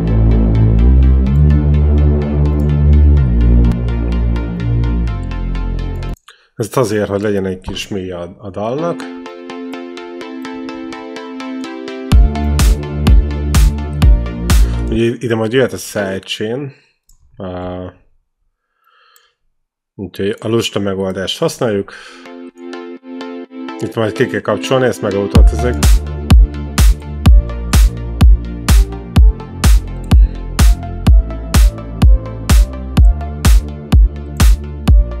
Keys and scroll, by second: 3.5 ctrl+l, 5.9 space, 8.6 space, 10.8 ctrl+b, 14.8 space, 17.9 alt+Right, 21.8 space.